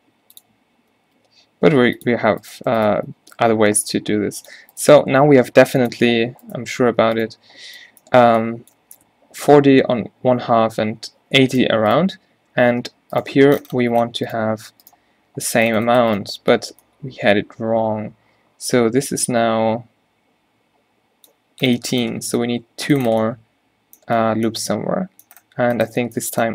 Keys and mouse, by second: 1.1 g, 3.4 g, 5.2 g, 6.1 g, 9.1 Tab, 12.3 Tab, 12.9 Tab, 15.6 Tab.